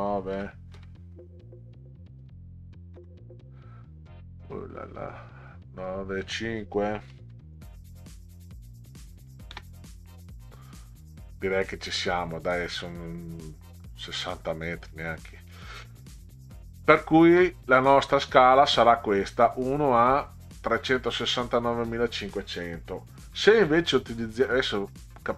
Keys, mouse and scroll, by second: 0.3 9, 0.7 KP_Enter, 1.9 click, 3.0 Delete, 5.5 click, 7.1 5, 7.2 KP_Enter, 8.9 click, 9.5 space, 20.5 click.